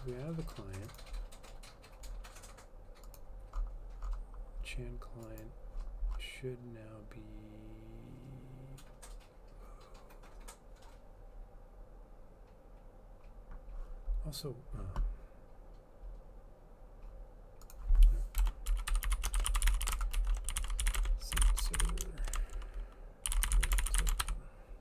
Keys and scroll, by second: 18.5-24.8 typing.